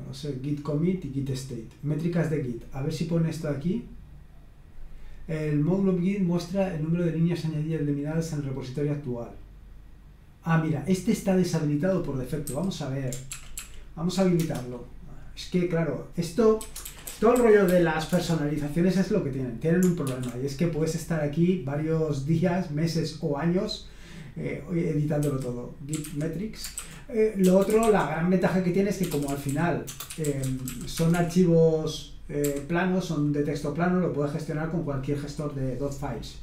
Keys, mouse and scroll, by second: 0.9 click, 1.9 click, 2.8 click, 8.2-9.3 scroll down 1, 11.7-12.7 drag, 12.5 q, 13.3 ctrl+p, 13.6 ctrl+p, 14.4 Return, 16.3-20.0 typing, 22.9 scroll up 1, 25.2-32.4 typing.